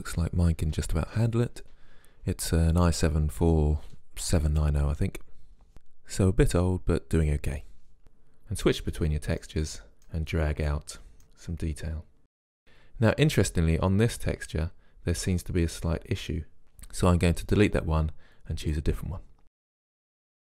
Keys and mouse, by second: 0.9 middle click, 2.1 middle click, 3.4-5.2 middle drag, 5.2 click, 5.5 middle click, 6.0 click, 9.1 click, 9.3 middle click, 9.5-12.0 drag, 18.9-20.2 drag, 20.3 click.